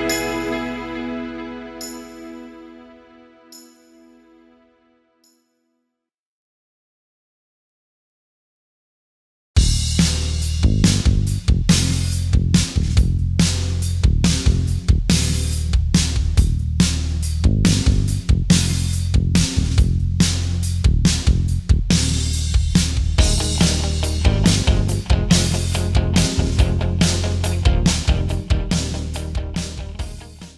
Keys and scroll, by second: 5.9 space.